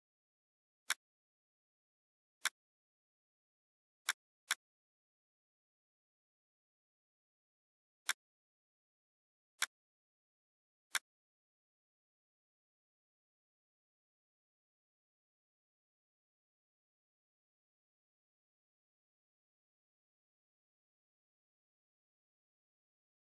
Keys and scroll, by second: 3.6 ctrl+z, 5.5 Down, 6.7 Left, 8.7 F4.